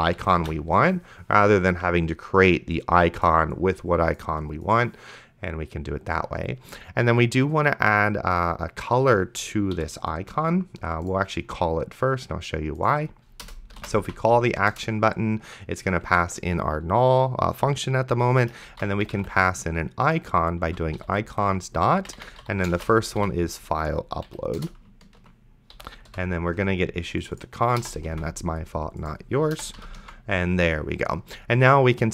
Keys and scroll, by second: 0.2 ,, 0.7 s, 10.0 ,, 10.2 Return, 14.0 a, 14.7 Return, 16.0 Tab, 18.7-23.9 typing, 24.3 Down, 24.6 Return, 25.8 End, 26.1 ;, 27.8 BackSpace, 28.4 ctrl+s, 29.6 BackSpace, 29.8 ,, 30.3 ctrl+s.